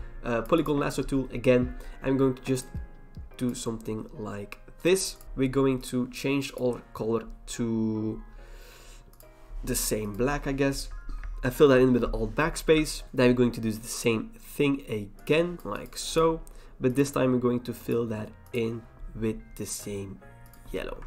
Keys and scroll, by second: 11.7 alt+BackSpace, 12.6 ctrl+d.